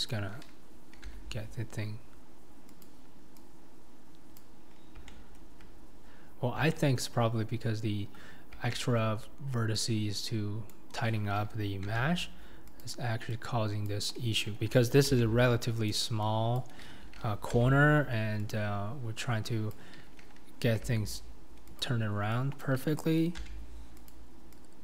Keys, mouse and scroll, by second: 0.1 click, 1.1 g, 4.4 click, 4.7-5.1 scroll down 1, 5.1-6.3 shift+middle drag, 6.3-6.7 scroll down 3, 6.7-8.0 shift+middle drag, 8.0-8.7 scroll up 5, 8.7-10.7 shift+middle drag, 10.7 click, 12.0 g, 13.9 click, 15.2 g, 16.6 click, 17.6 g, 19.7 click, 20.9 g, 22.6 click, 23.5 g.